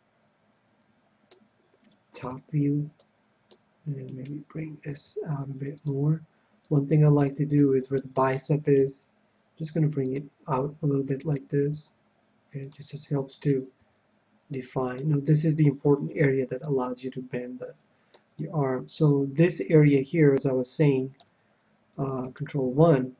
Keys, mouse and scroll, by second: 2.2 KP_7, 3.0 click, 3.1-4.7 middle drag, 4.0-5.8 right drag, 5.0 g, 6.0-7.5 drag, 6.7 KP_1, 7.3-9.1 middle drag, 8.0-9.8 right drag, 8.8 g, 10.1-11.8 drag, 11.2-12.9 right drag, 11.6 g, 12.7-14.5 drag, 13.4 right click, 13.6 middle click, 13.6 g, 14.5 right click, 15.0-16.8 drag, 16.6-20.0 middle drag, 21.1 KP_1, 22.3 ctrl+KP_1.